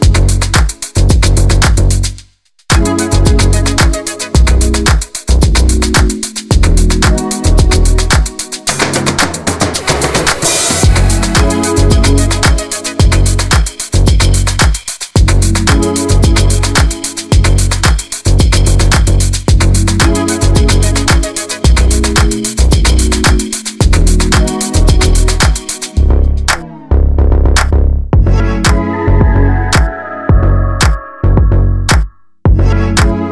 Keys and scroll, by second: 14.0 ctrl+alt+z, 23.3 Delete, 24.6 ctrl+d, 25.7 v, 26.2 alt+v, 29.2 alt+space.